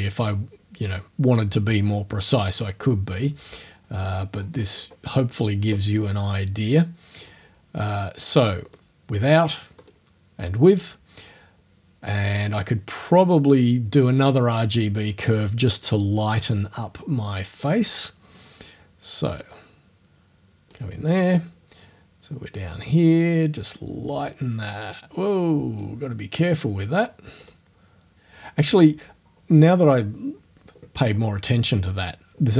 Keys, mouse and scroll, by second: 3.2 click, 4.3-5.0 scroll up 2, 7.2 click, 8.7 click, 9.8 click, 15.0 middle click, 17.6 click, 19.4-20.9 drag, 20.9-22.8 middle drag, 22.8-26.0 drag, 26.0-27.4 middle drag, 27.4 right click, 27.6-30.6 middle drag, 31.0 scroll up 1.